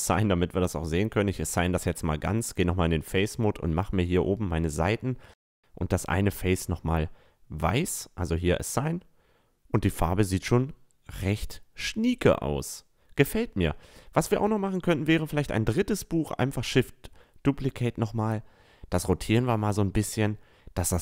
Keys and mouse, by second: 0.2 click, 0.6 Tab, 1.3 Tab, 2.1-2.7 middle drag, 2.7-4.7 drag, 3.1-4.7 right drag, 7.5 click, 7.9 Tab, 8.4 a, 9.8-12.1 drag, 11.8 shift+d, 12.1-12.9 right drag, 13.0-14.8 drag, 14.8-16.6 middle drag, 15.3 r, 17.4 r.